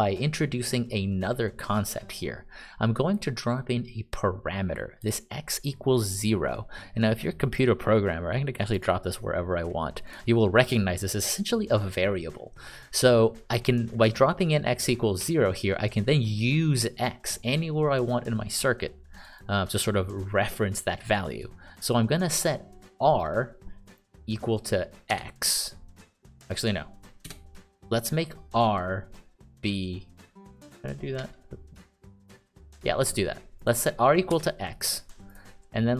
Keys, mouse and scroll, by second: 9.1 click, 10.4 click, 25.5 x, 27.6 BackSpace, 34.7 x, 35.7 click.